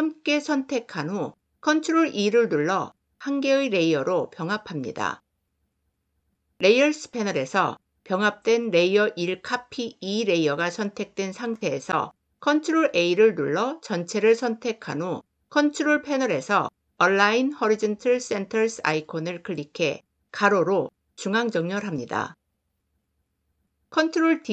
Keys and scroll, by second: 1.6 ctrl+e, 12.4 ctrl+a, 23.9 ctrl+d.